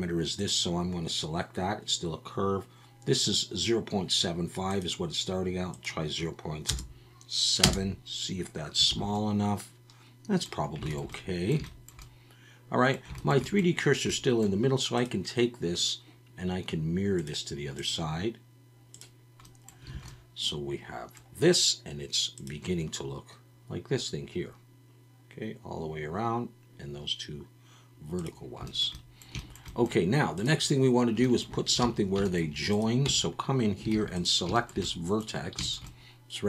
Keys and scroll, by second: 8.9 alt+a, 19.9 alt+a, 31.8 alt+a, 33.0 Tab, 33.9 alt+a.